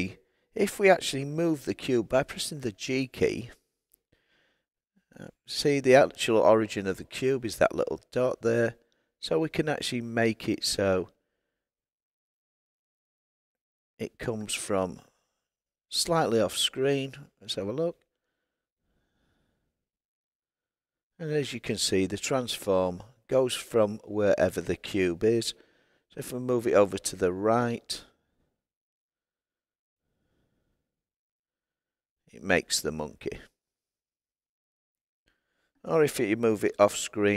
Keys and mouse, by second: 2.8 g, 15.0 click, 25.3 g, 26.6 click, 36.6 g.